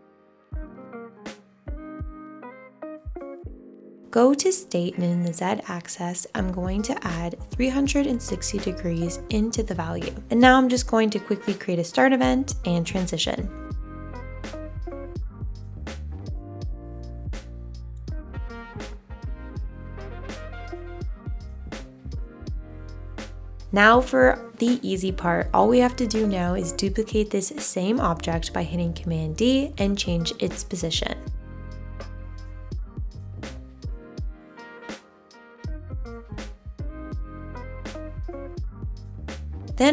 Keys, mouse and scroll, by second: 1.7 super+z, 16.6 2, 33.5 super+d.